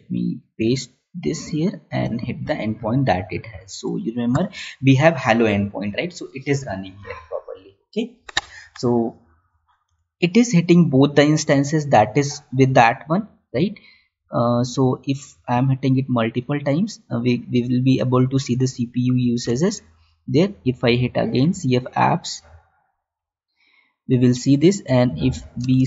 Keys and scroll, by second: 19.8 alt+Tab, 25.5 space.